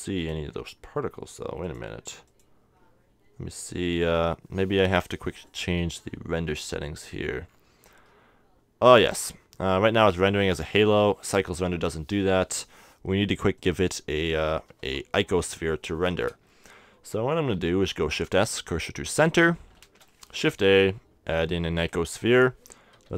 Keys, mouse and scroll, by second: 1.6-3.5 drag, 5.5-7.2 drag, 7.0-11.8 middle drag, 13.6-15.2 drag, 14.8 KP_7, 17.5 shift+s, 19.8 shift+a, 22.9 shift+t.